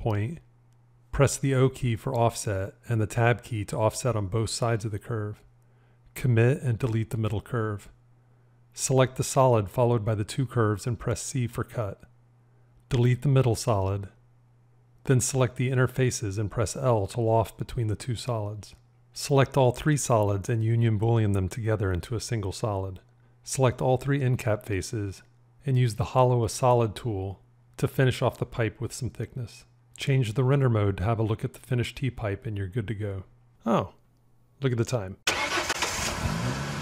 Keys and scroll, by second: 0.9 o, 3.0 Tab, 7.6 x, 11.4 c, 18.1 l, 21.5 q, 21.8 q.